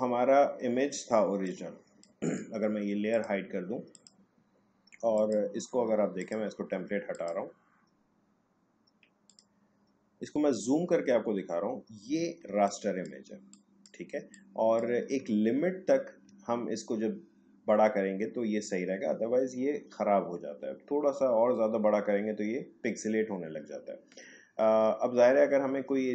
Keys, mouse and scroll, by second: 10.7-11.1 alt+scroll up 1, 12.4 space, 12.6 click, 12.9 space, 14.3 click, 14.3 space, 16.3-17.6 alt+scroll up 1, 17.6-19.7 alt+scroll down 1, 21.1-22.6 alt+scroll up 1, 22.6-23.7 alt+scroll down 1.